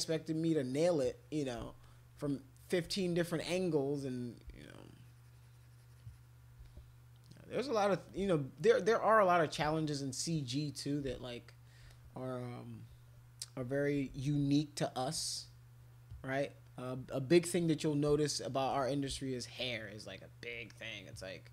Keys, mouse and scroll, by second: 0.5 alt+click, 0.7 alt+click, 1.0 alt+click, 1.1 alt+click, 1.8 alt+click, 2.3 click, 3.7 click, 3.9 click, 4.1 click, 4.6-6.3 shift+drag, 6.6-7.7 drag, 8.6 alt+click, 8.8 alt+click, 9.0 alt+click, 9.2 alt+click, 9.7 shift+click, 9.9 shift+click, 11.9 click, 13.9 [, 14.1 [, 14.3 [, 14.4 [, 16.1 click, 16.4 click, 16.6 click, 18.2 shift+click, 19.2 alt+click, 19.6 alt+click, 19.9 alt+click, 20.5 click, 20.8 click.